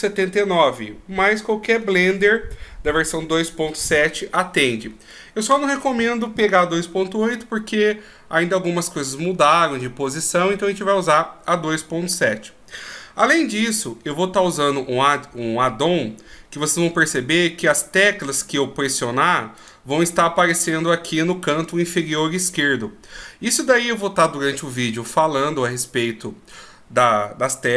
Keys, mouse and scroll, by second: 18.2 click, 19.6 right click.